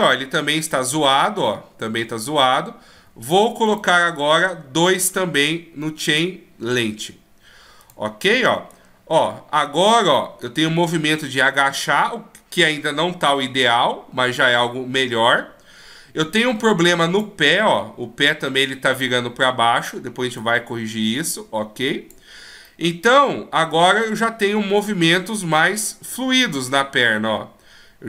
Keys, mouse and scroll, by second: 3.7 right click, 5.6 click, 6.0 click, 7.8 right click, 8.7 click, 17.5-20.4 scroll down 3, 18.0-20.4 scroll up 1, 20.4 click, 22.6 middle click, 24.8 right click, 25.5 g.